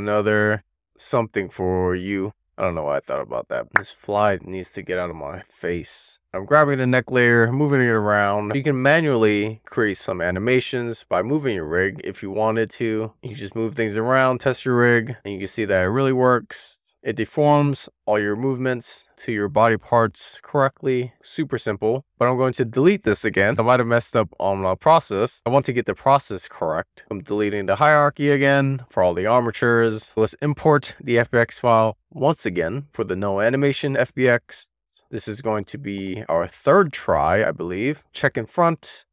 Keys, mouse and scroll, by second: 1.9 super+z, 2.8-3.6 middle drag, 6.2 middle click, 6.8 click, 7.7 click, 9.2-9.5 middle drag, 9.7 super+z, 10.0-10.4 middle drag, 10.5-10.9 shift+middle drag, 11.0-11.4 scroll down 2, 11.4 shift+middle click, 12.3 scroll up 1, 12.4 middle click, 14.1 middle drag, 16.6 click, 19.8 super+z, 20.3 middle click, 20.9 w, 21.2 scroll down 2, 21.5 shift+middle click, 21.8 middle click, 23.3-27.7 right drag, 27.7 click, 28.0-30.3 right drag, 30.3-33.2 drag, 37.9 middle click, 38.8 click.